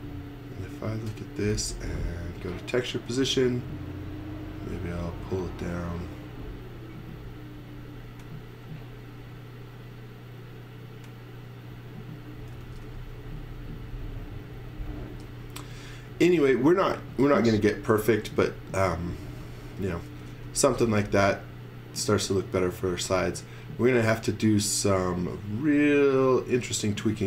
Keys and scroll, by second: 12.3-13.3 typing, 15.6 space, 16.1 x, 16.4 v, 18.3 space, 19.8-20.8 typing, 22.4 x, 24.2 x, 24.8 v.